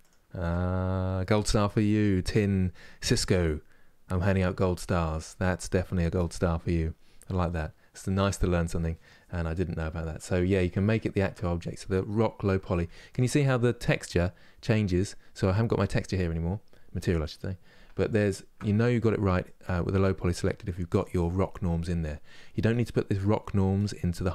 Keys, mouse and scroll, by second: 10.3 ctrl+click, 10.7 ctrl+click, 12.9 ctrl+click, 17.9 ctrl+click.